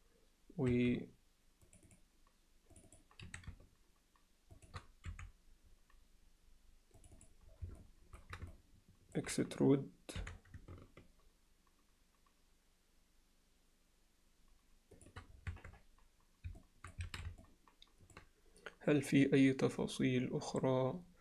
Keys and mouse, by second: 0.8 2, 1.7 click, 2.8 click, 2.9 click, 3.3 s, 5.2 3, 7.1 click, 7.2 click, 7.8 middle click, 8.5 ctrl+alt+middle click, 10.3 e, 16.0 Tab, 16.6-16.9 alt+middle drag, 17.1 alt+a, 17.4-18.2 alt+middle drag.